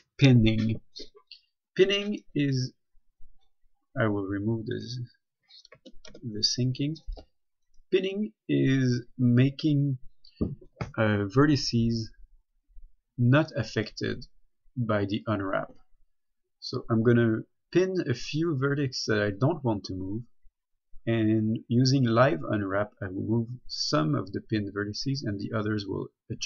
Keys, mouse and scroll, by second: 2.4 right click, 5.0 click, 6.0-6.4 typing, 7.9 right click.